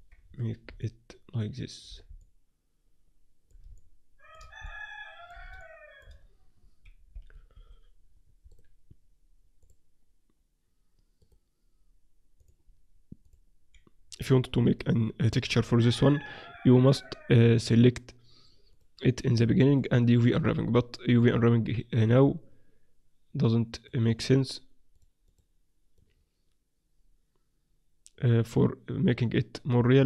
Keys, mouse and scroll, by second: 0.8 middle click, 7.1 KP_0, 7.5 KP_7, 9.3 click, 10.8-15.0 drag, 11.4 right click, 12.4 right click, 15.3-16.8 middle drag, 16.8-30.0 drag.